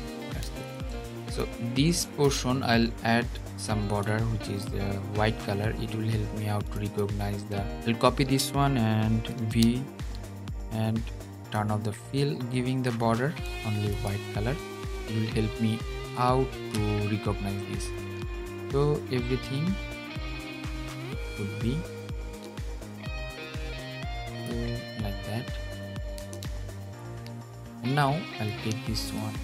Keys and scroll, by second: 9.0 super+v.